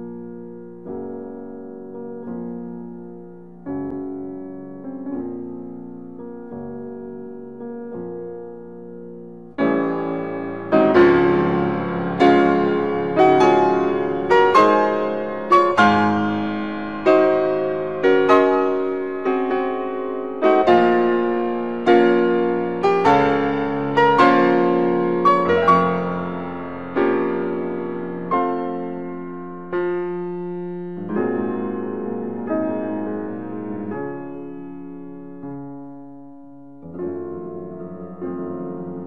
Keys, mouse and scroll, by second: 0.7-4.6 middle drag, 9.8 e, 11.8 x, 13.9 z, 20.8 z, 26.0 click, 27.6 scroll up 1, 28.7-32.9 middle drag, 34.2 s, 37.6 click, 38.3-39.0 middle drag.